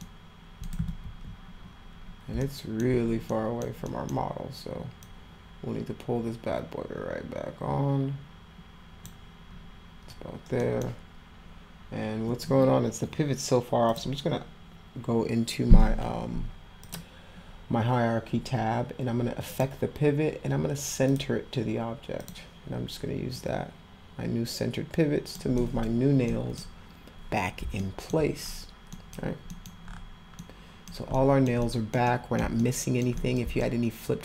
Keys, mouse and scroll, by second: 0.0 alt+middle click, 2.4 alt+middle click, 3.3 middle click, 3.9 middle click, 5.0-9.0 drag, 10.6 middle click, 13.9 click, 16.8 click, 19.5 click, 21.1 click, 22.2 click, 23.3-25.3 drag, 25.6 middle click, 26.3 middle click, 27.8 alt+middle click, 28.9 middle click, 29.5 middle click, 30.3 middle click, 31.1 middle click, 31.6 middle drag, 32.0 middle click, 32.6 alt+middle click, 33.2 middle click, 33.6 alt+middle click.